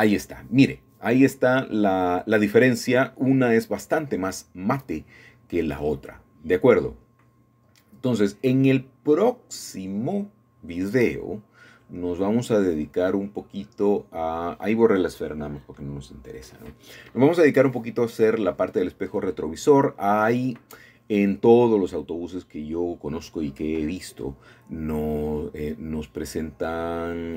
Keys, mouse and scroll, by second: 0.0 click, 2.5-3.3 scroll up 2, 3.3-5.1 middle drag, 5.2-5.6 scroll down 3, 6.0-7.4 middle drag, 7.3-9.2 scroll down 4, 7.5 middle click, 9.2 shift+middle click, 9.8 click, 10.4 click, 12.4 click, 13.3-13.8 scroll up 5, 14.2 click, 15.7 click, 16.8 click, 18.4-19.7 scroll down 7, 19.7-20.4 middle drag, 20.4-21.8 scroll up 2, 22.3-24.0 drag, 24.3-27.3 drag.